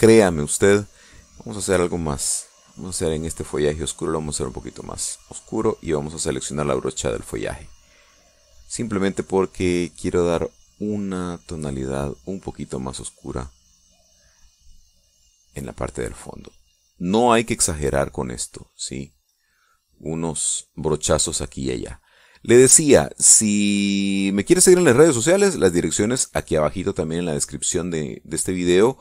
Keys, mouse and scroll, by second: 0.1 click, 1.8 click, 3.5 click, 5.0-6.2 drag, 7.4 click, 8.2 click, 9.0 click, 10.0 click, 11.8 click, 12.2 click, 13.0 click, 13.3 click, 14.3 click, 14.7 click, 15.0 click, 16.2 click, 16.6 click, 17.8 click, 18.3 click, 18.6 middle click, 18.6 click, 18.8 middle click, 19.0 click, 19.4 click, 20.2 click, 21.2 click, 21.5 click, 22.3 middle click, 23.0 click, 23.4 click, 24.7 click, 25.0 click, 25.4 click, 25.8 click, 26.5 click, 27.3 click, 27.6 click, 28.8 click.